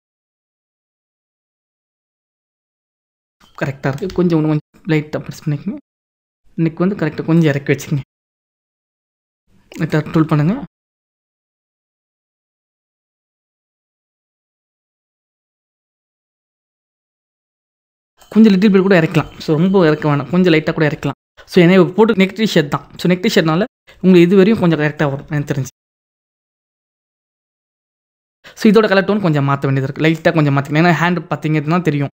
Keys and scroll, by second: 15.0 ctrl+=, 26.7 ctrl+-.